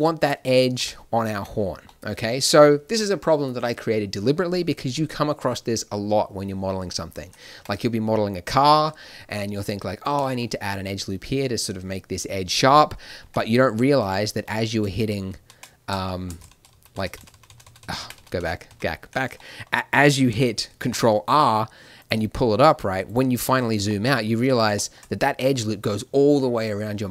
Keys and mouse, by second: 0.7 Tab, 1.3 Tab, 1.4 right click, 7.5 Tab, 12.1 middle click, 13.2 Tab, 14.7 ctrl+z, 15.0 ctrl+z, 15.3 ctrl+z, 16.6 ctrl+z, 16.7 ctrl+z, 16.9 ctrl+z, 17.1-17.6 ctrl+z, 17.8 ctrl+z, 17.9 ctrl+z, 17.9-19.3 middle drag, 18.1 ctrl+z, 18.3 ctrl+z, 18.6 ctrl+z, 20.8 ctrl+r, 26.8 middle click.